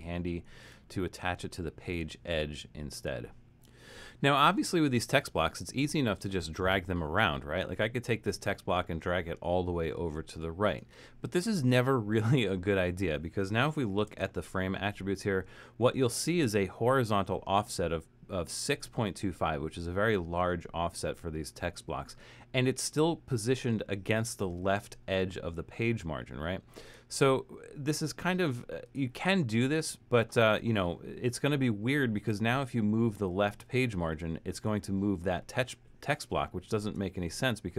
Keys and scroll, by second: 14.0 shift+Return, 36.8 super+z.